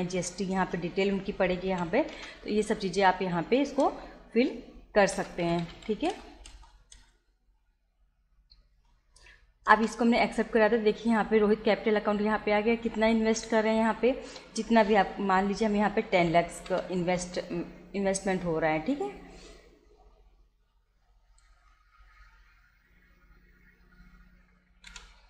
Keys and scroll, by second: 0.6 Return, 1.7 y, 2.1 Return, 3.0 Return, 3.7 Return, 4.8-6.1 typing, 6.1 Return, 8.8 Return, 15.9 1, 16.2 0, 24.9 BackSpace.